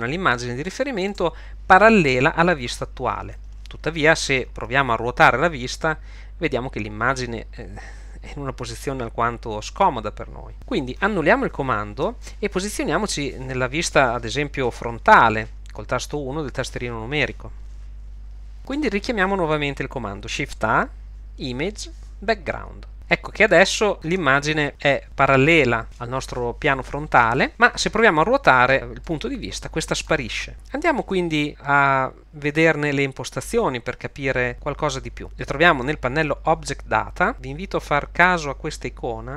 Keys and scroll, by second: 11.9 super+z, 18.2 1, 20.3 Home, 20.7 shift+a, 24.7 shift+1, 33.1 1.